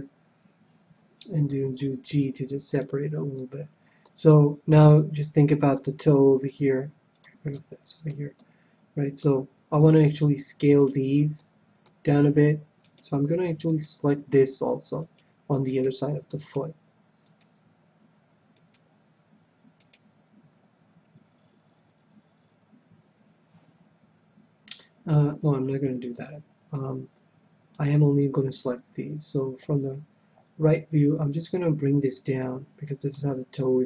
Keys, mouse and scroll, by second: 1.8 g, 2.8-4.5 drag, 3.4-6.0 middle drag, 5.7 KP_1, 7.1-8.8 drag, 7.5-9.9 middle drag, 9.7-12.4 right drag, 11.3-12.9 middle drag, 12.8-20.3 right drag, 25.8 c, 27.8-29.5 right drag, 29.6 KP_3, 31.4-33.2 drag.